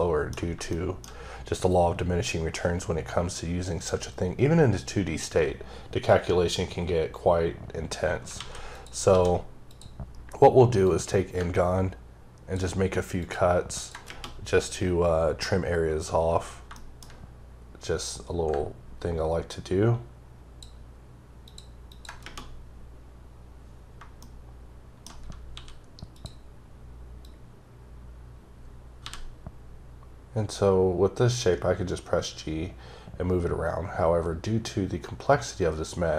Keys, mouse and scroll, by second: 0.7 double middle click, 1.0-1.3 shift+scroll down 2, 7.0-7.4 scroll down 1, 8.4 alt+a, 8.7 click, 9.1 d, 9.7 click, 10.8 click, 13.7 ctrl+double click, 16.6 shift+Num_Lock, 16.7 shift+middle click, 18.0 click, 21.9 ctrl+double click, 24.2 shift+middle click, 25.5 d, 26.1 click, 27.2 click, 29.0 g.